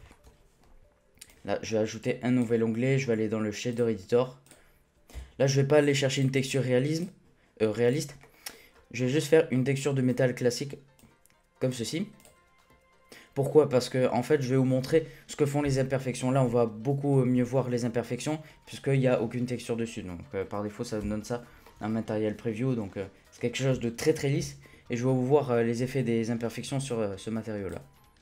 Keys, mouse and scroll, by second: 0.1-1.4 shift+middle drag, 1.4-5.1 drag, 5.1 n, 6.1 click, 6.9-7.9 drag, 8.2-8.7 middle drag, 8.7-9.5 scroll up 4, 9.5-10.0 scroll up 1, 10.0-13.6 drag, 13.6-14.3 scroll down 1, 14.3-17.3 middle drag, 21.6-23.4 shift+middle drag, 23.4-24.4 scroll down 1, 24.4-26.4 scroll down 1, 26.4 scroll down 1.